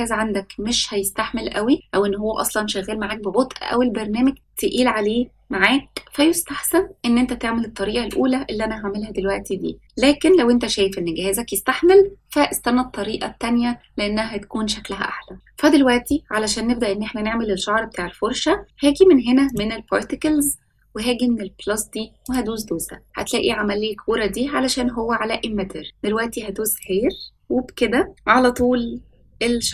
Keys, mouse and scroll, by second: 19.4 click, 22.2-26.3 drag, 26.7 click, 27.5-28.1 scroll down 4, 28.1 shift+middle click, 28.8-29.5 scroll up 2, 29.6-29.7 shift+middle drag.